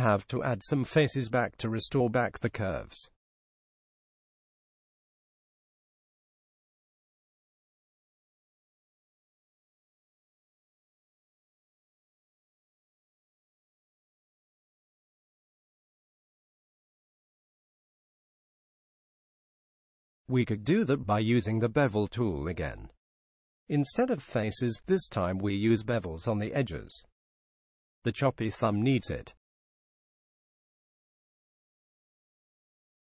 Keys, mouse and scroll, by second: 0.7-2.2 middle drag, 5.4-7.1 drag, 14.4-16.2 drag, 16.2-17.7 middle drag, 23.0-24.8 right drag, 25.6-27.4 right drag, 28.0 w.